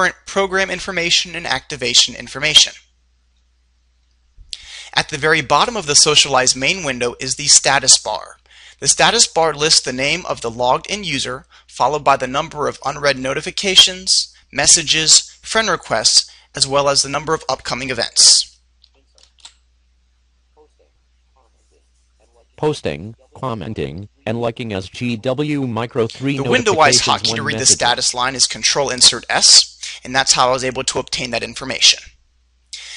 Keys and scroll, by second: 23.1 ctrl+s.